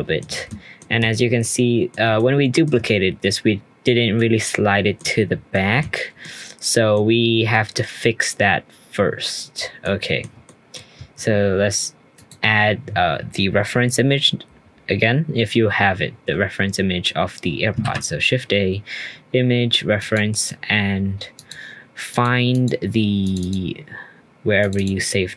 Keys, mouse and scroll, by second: 1.0-1.4 scroll up 2, 1.4-2.7 middle drag, 2.7-4.1 scroll up 3, 4.1-5.0 middle drag, 5.0 scroll down 3, 5.5-6.1 middle drag, 6.1 scroll down 1, 6.2-7.5 middle drag, 7.5-8.8 scroll up 3, 8.8-9.8 scroll down 1, 9.8-10.7 shift+middle drag, 10.7-12.1 scroll up 2, 12.1 click, 12.6-15.7 scroll down 2, 17.8 shift+a.